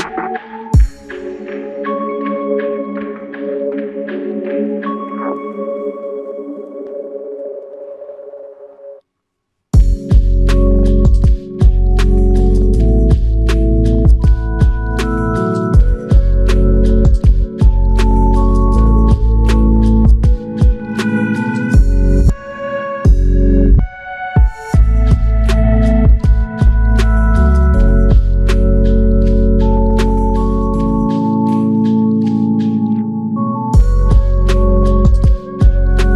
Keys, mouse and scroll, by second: 1.7 alt+click, 4.3 shift+click, 8.0 alt+shift+click, 15.8 shift+click, 19.8 alt+click, 23.4 alt+shift+click, 24.5 alt+click, 28.3 typing, 34.0 alt+shift+click.